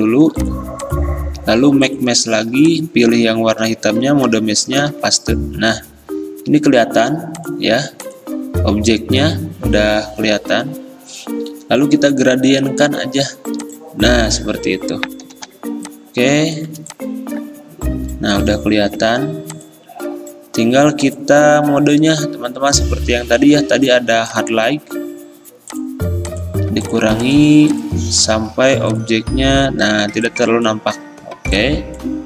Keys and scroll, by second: 4.9 ctrl+v, 15.4 g.